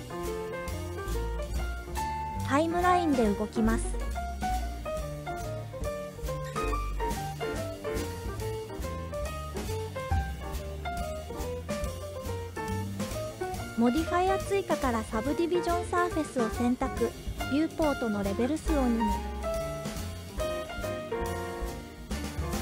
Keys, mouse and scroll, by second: 2.5-6.1 drag, 10.2 click, 12.0 click, 16.9 click, 19.2 click.